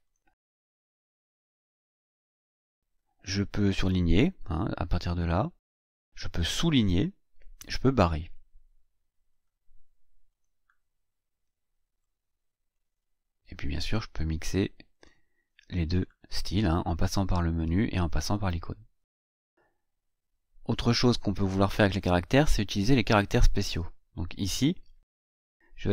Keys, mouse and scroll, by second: 0.0 click, 3.7 click, 5.5 click, 9.2 click, 10.2 click, 12.0 click, 14.9 click, 15.9 click, 19.5-19.8 scroll down 2, 22.0-23.4 drag, 24.7 Delete.